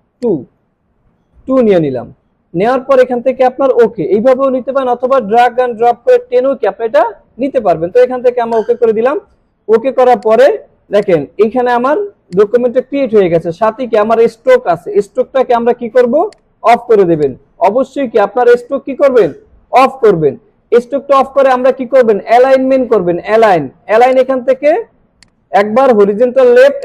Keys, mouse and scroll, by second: 0.2-0.8 drag, 8.5 click, 11.1-12.0 drag, 16.2 click, 24.1 click.